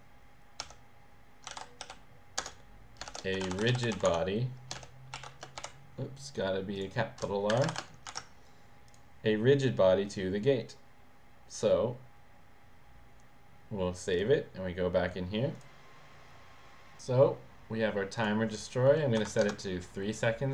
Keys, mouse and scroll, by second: 0.6-6.1 typing, 2.4 Return, 6.7 click, 7.5 Delete, 7.7 shift+r, 8.1 ctrl+s, 8.8 click, 14.1 click, 15.8 click, 18.2 click, 19.2 3, 19.4 Return.